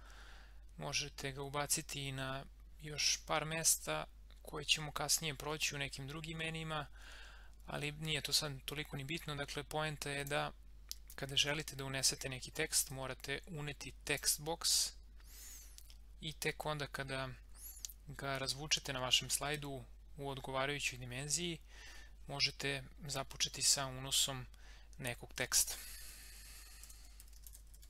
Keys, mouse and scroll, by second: 10.2 click, 13.0-16.6 drag, 25.2-27.8 typing.